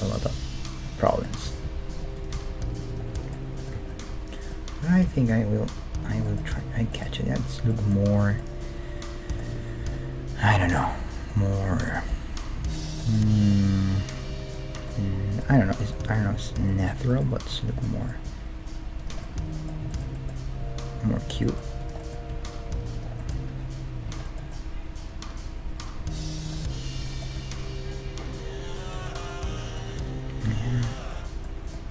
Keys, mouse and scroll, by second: 0.2 g, 1.4 g, 2.3 g, 3.1-6.2 middle drag, 3.8 Tab, 5.0 KP_1, 10.2 scroll down 1, 10.4-10.8 scroll up 1, 16.1 Tab, 16.4-19.2 right drag, 18.2 g, 20.6 g, 21.8-23.6 right drag, 22.3 g, 23.5 Tab, 23.6-26.5 middle drag, 26.7-30.5 middle drag, 30.5 Tab, 30.9-31.9 right drag.